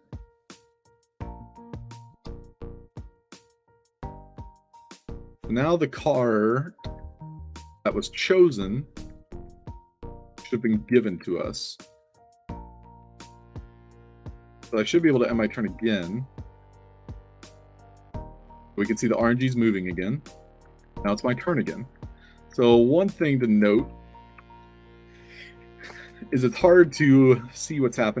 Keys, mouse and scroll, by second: 2.2 e, 3.1-3.6 scroll up 4, 6.9 d, 8.2-12.3 typing, 13.3-15.5 typing, 17.0 e, 19.1 e, 20.2 d, 21.9 d, 22.4 d, 25.8 space, 27.2 click, 28.1-28.2 shift+right drag.